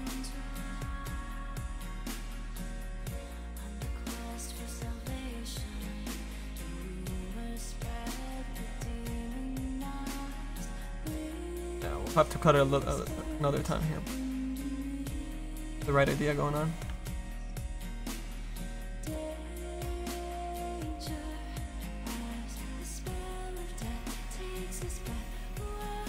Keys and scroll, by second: 21.9 ctrl+z.